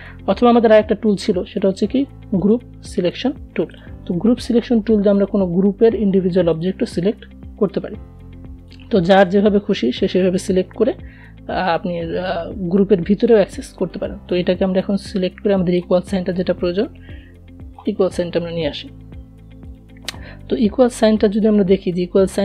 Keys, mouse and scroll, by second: 0.7 right click, 1.9 click, 5.9 Delete, 6.9 click, 9.0 v, 9.9 click, 12.2-14.6 alt+drag, 21.9 click.